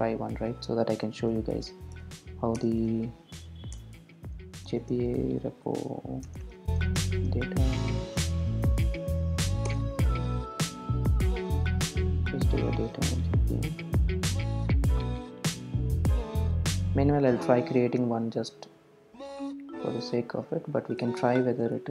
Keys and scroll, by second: 3.9 Return, 9.8 Return.